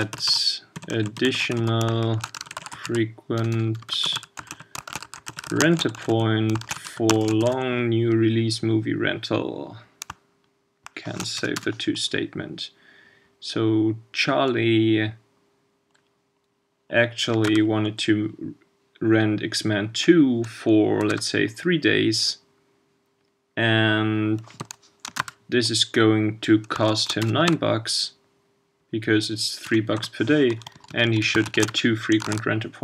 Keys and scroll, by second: 32.3 super+s.